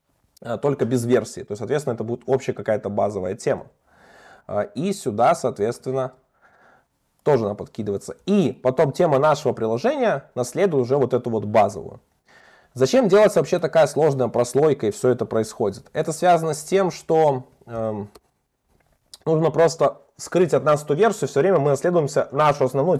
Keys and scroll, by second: 1.6 alt+Up, 2.7 alt+Up, 3.6 super+v, 6.0 alt+super+l, 6.5 Escape, 8.2 alt+Up, 9.3 alt+Up, 9.9 alt+Up, 17.3 super+x, 18.5 super+v, 21.1 super+BackSpace.